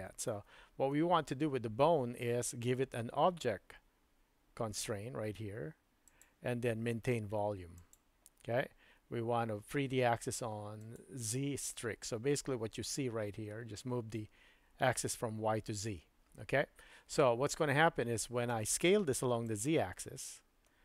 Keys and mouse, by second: 0.3 super+z, 6.1-8.0 drag, 10.8 click, 19.5-20.8 drag.